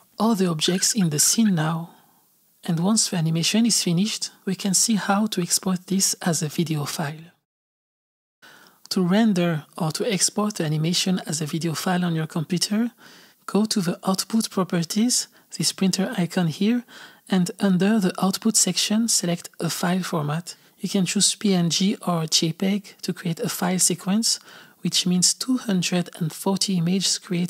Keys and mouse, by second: 0.1 click, 0.6 space, 1.4 space.